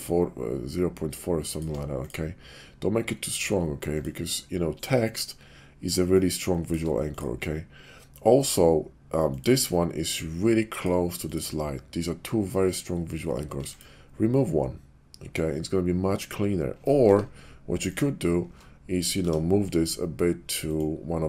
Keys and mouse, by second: 0.0-1.5 shift+drag, 2.0 click, 3.9 click, 5.3 shift+click, 6.2 shift+click, 7.1 click, 9.3 click, 9.4 click, 11.1 click, 13.5 x, 17.0 ctrl+z, 17.8 click, 18.4 Tab, 19.1 a, 20.6 click.